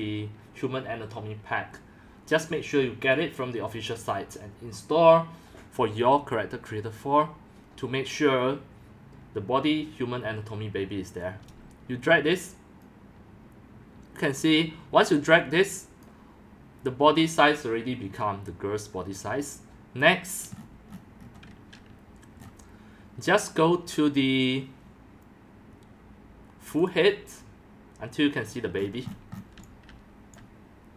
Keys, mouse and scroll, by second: 12.8-15.6 drag, 16.0-17.0 drag, 17.6 click, 18.5-19.8 drag, 20.5-21.0 scroll down 11, 21.1 scroll up 3, 21.9-22.8 scroll, 26.4 scroll, 26.9-28.2 drag, 28.7-29.2 scroll down 8, 29.2 scroll, 29.6-29.9 typing, 30.4 click.